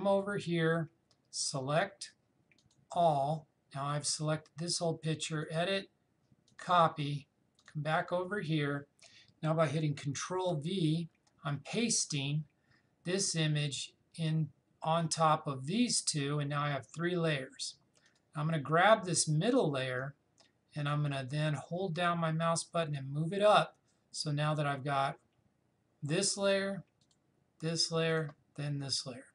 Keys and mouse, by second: 10.5 ctrl+v, 18.1-25.5 drag, 27.0 click.